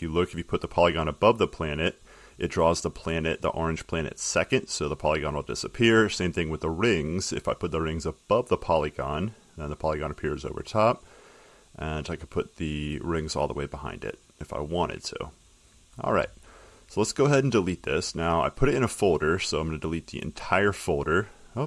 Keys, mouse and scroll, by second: 5.4-7.5 drag, 12.0 click, 15.3 click, 19.1 click.